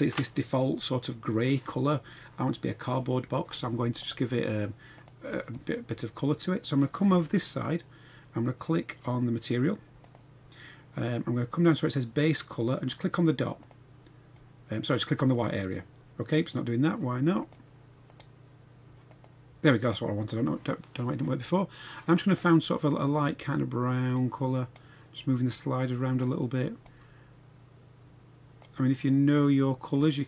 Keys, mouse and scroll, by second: 4.0 click, 4.4 click, 5.0 click, 10.1 click, 17.4-17.8 drag, 19.0 click.